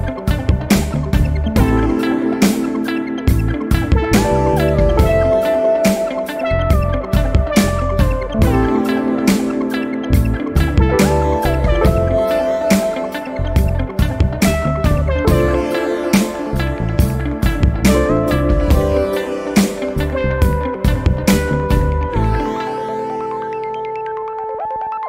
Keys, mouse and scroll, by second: 1.9 click, 3.3 scroll up 2, 5.3 scroll up 2, 7.4 scroll down 2, 8.4-10.5 right drag, 8.4-10.5 drag, 18.5 click, 22.7 click, 25.0 click.